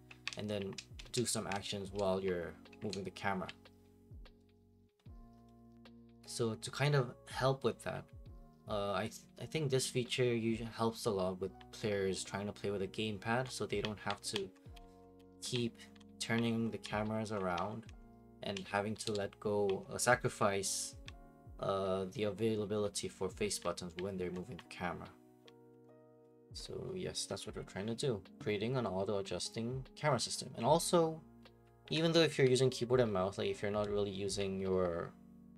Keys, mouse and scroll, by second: 0.0-35.5 typing.